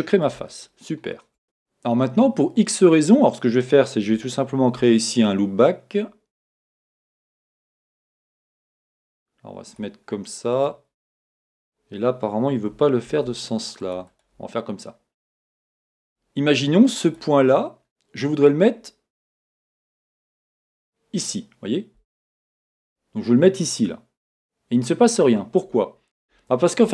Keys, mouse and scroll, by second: 0.5 shift+middle click, 1.3 shift+scroll up 1, 1.4-10.7 drag, 4.6 ctrl+r, 13.1 ctrl+r, 14.2 click, 20.6 g, 26.5 Escape.